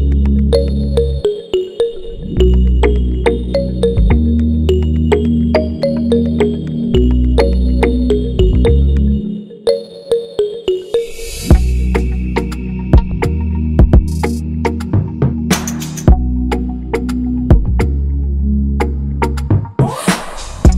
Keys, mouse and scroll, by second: 1.1 click, 1.7 click, 2.3 click, 3.5 e, 6.0 ctrl+a, 12.0 click, 13.0 click, 13.7 click, 14.6 scroll down 3, 15.0 click, 15.4 scroll down 1, 15.9 click, 16.4 scroll up 2, 16.6 click, 18.1 click.